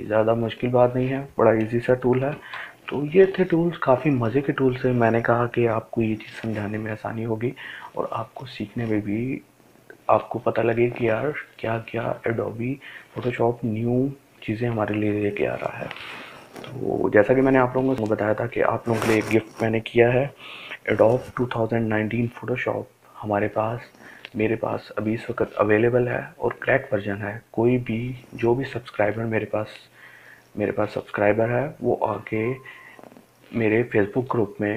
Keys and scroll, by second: 2.7 ctrl+alt+z.